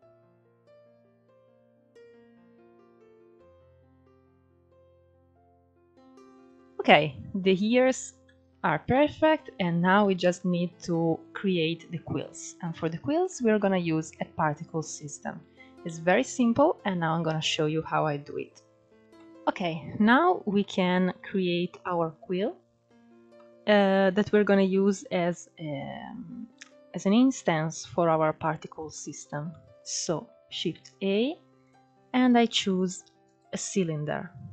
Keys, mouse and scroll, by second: 0.2-0.7 scroll down 5, 0.3 middle click, 0.7 middle click, 1.1 scroll up 5, 1.3 middle click, 1.9 click, 2.0 scroll up 3, 2.2 f, 2.4 click, 2.7 scroll down 6, 2.7 middle click, 3.2 middle click, 3.5-3.9 scroll up 2, 3.9 click, 4.2 scroll up 1, 4.4-4.9 middle drag, 4.9 scroll up 1, 5.1 shift+middle click, 5.7-6.2 scroll down 2, 6.2-7.1 shift+middle drag, 7.2-7.6 scroll up 2, 7.6-7.9 scroll down 2, 7.9-9.4 middle drag, 9.4-10.0 scroll down 1, 10.0-10.7 shift+middle drag, 10.7-11.9 scroll up 1, 11.9-12.4 scroll down 2, 12.4-13.5 middle drag, 13.5-14.6 scroll up 2, 13.9 shift+middle drag, 14.6-15.1 scroll down 4, 15.1-16.5 shift+middle drag, 16.5-16.9 scroll up 2, 16.9-18.2 shift+middle drag, 18.2-18.9 scroll down 2, 18.9-22.2 shift+middle drag, 22.2-22.8 scroll down 2, 22.8 scroll down 1, 23.0 middle click, 23.8-24.4 scroll up 3, 24.6 scroll down 3, 25.0 middle click, 25.6 scroll up 2, 26.2-30.0 shift+middle drag, 30.0 shift+a.